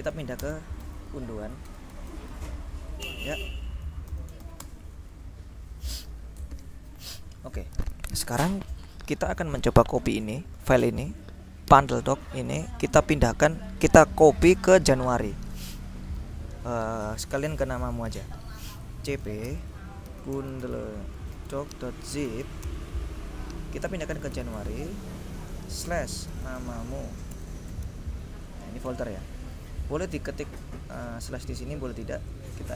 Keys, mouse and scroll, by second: 0.0-2.2 typing, 3.2 Return, 4.2 ctrl+l, 4.5 ctrl+s, 4.7 ctrl+Return, 11.3-13.1 drag, 18.9-28.9 typing, 31.7 BackSpace.